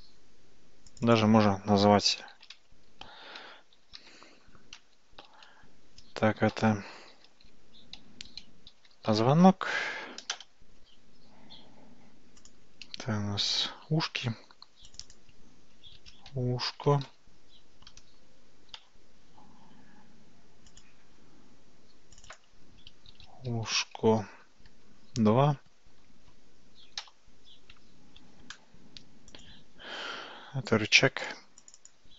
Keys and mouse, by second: 1.0-11.0 drag, 12.5 click, 14.9-19.5 drag, 20.8 click, 22.4-27.4 drag, 29.4 click, 31.2 click, 31.6-32.1 drag.